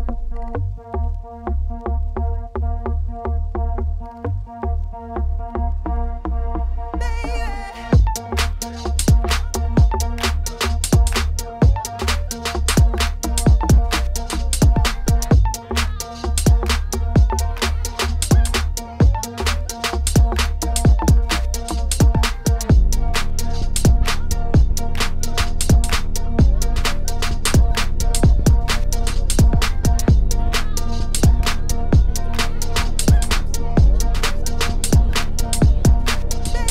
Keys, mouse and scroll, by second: 0.1-2.7 alt+shift+drag, 2.7-3.9 middle drag, 5.4 middle click, 5.9 shift+a, 7.4 middle click, 8.0 1, 10.1 KP_1, 10.3 KP_3, 10.9 g, 11.9 g, 12.9 shift+middle click, 13.2-14.5 scroll up 1, 14.5-15.1 scroll up 1, 15.1-19.8 drag, 22.4 click, 23.5 click, 23.9 shift+middle click, 27.2-36.7 alt+drag.